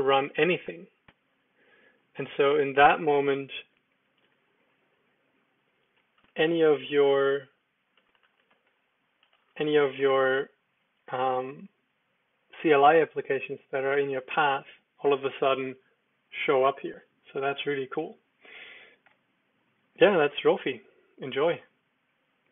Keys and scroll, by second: 3.3-4.5 typing, 6.2-9.2 typing, 19.2 Escape.